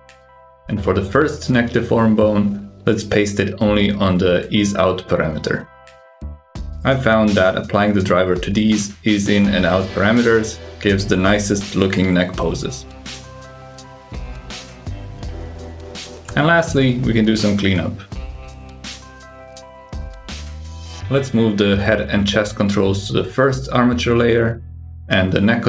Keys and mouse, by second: 0.2 click, 1.9-3.3 drag, 4.6 g, 14.0 g, 20.3 shift+click, 21.2 m, 23.3 click, 24.2 m.